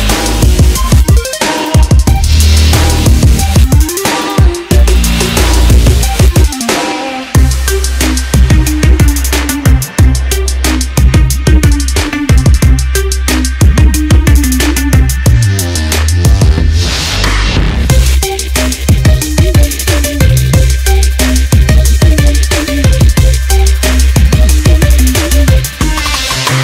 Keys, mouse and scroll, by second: 3.0 r, 9.3 e, 16.5 e, 23.5 e.